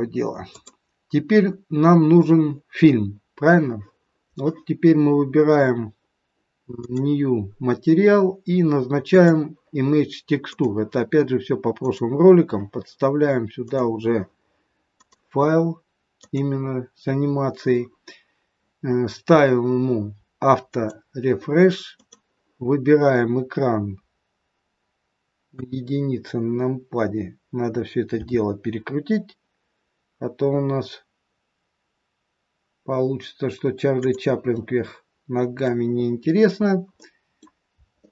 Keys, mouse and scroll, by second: 0.4 click, 6.7 click, 9.1 click, 11.8 click, 18.6-20.8 scroll down 7, 20.8 click, 21.9 click, 25.5 KP_1, 26.5-28.1 scroll down 5, 28.1 r, 34.5 middle click, 36.0-37.0 scroll up 5, 37.0 middle click, 38.0 shift+middle click.